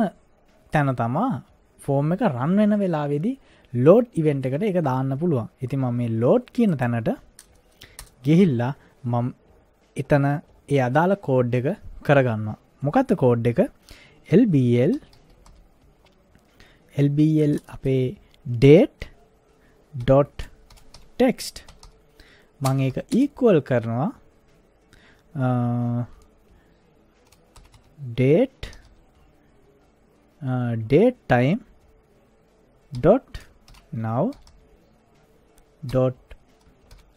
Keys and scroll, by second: 8.0 Return, 14.7-16.0 typing, 20.0-23.1 typing, 27.3-29.4 typing, 32.9-35.9 typing, 36.9 shift+t.